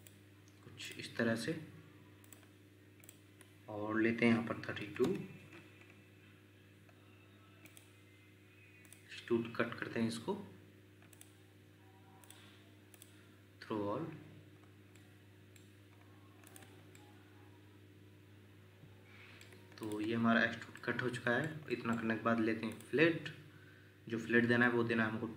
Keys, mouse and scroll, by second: 4.7 typing, 5.0 Return, 14.6-14.9 scroll up 1, 14.9 middle click, 15.9-16.6 scroll up 1, 16.6 Escape, 16.9 scroll up 1, 20.2 Escape, 20.3 scroll up 1, 20.8 shift+middle click, 22.2 Escape.